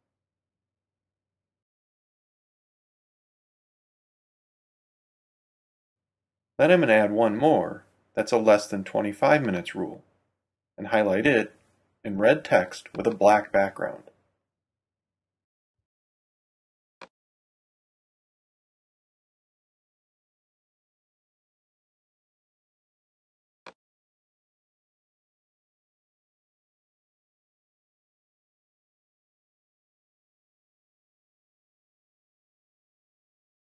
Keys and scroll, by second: 1.6-2.7 typing, 4.3 Return, 14.8-16.2 typing.